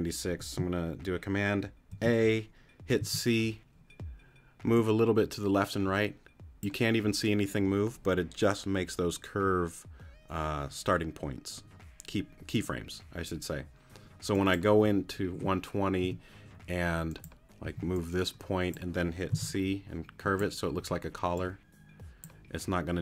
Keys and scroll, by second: 1.9 super+a, 3.1 c, 16.0 t, 17.6 t, 19.3 c.